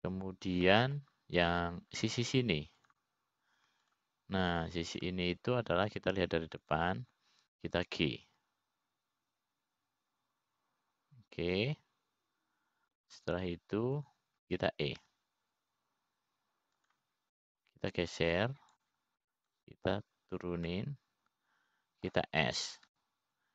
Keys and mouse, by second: 1.3-2.5 middle drag, 3.3 middle click, 5.5 click, 7.1 shift+click, 7.6 middle click, 10.9 g, 17.7 e, 20.6 click, 22.1 click, 23.3-23.5 middle drag.